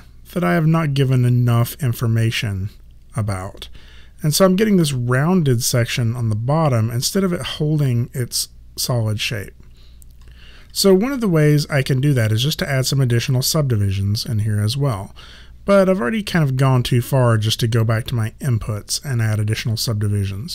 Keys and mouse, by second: 10.8 1.